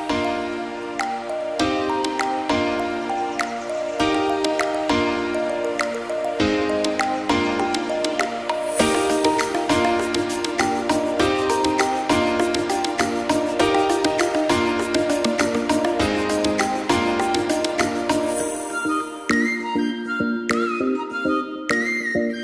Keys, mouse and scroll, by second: 0.4 click, 0.6 scroll up 1, 0.7 shift+middle drag, 0.9 click, 1.1 Tab, 1.6 ctrl+r, 4.0 click, 4.1 KP_3, 4.2 click, 4.5 x, 4.8 click, 5.0 click, 5.3 Tab, 5.4 click, 5.5-6.2 middle drag, 6.2 shift+a, 7.0 g, 7.9 s, 9.8 s, 10.5 g, 12.3 s, 13.2 g, 14.4 click, 14.8 click, 15.1-15.8 scroll up 6, 15.4 shift+middle drag, 15.8 shift+middle click, 16.1 click, 16.3 g, 17.6 shift+d, 19.1 click, 19.5 g, 21.0 click, 21.2 g, 22.0 click, 22.3 g.